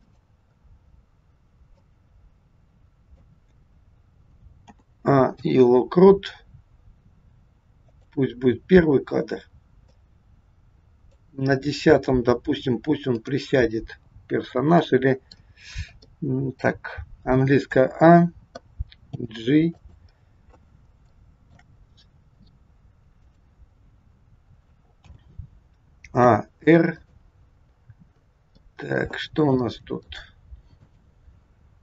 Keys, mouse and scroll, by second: 0.6-1.6 scroll down 2, 1.7 click, 4.6 a, 5.2 i, 10.0 click, 13.1 click, 14.8 middle click, 15.6-16.1 scroll down 3, 16.1 middle click, 17.7 a, 19.0 g, 20.1-20.7 scroll down 2, 21.2 shift+middle click, 21.8-22.2 scroll up 2, 23.2 click, 24.9 a, 26.2 r, 28.1 scroll up 4, 28.6 middle click, 29.6 shift+middle click, 30.7 click.